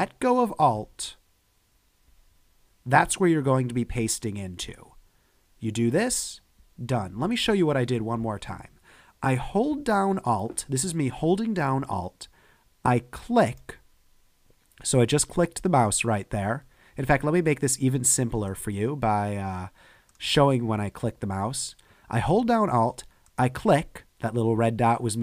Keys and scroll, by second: 8.0 super+z.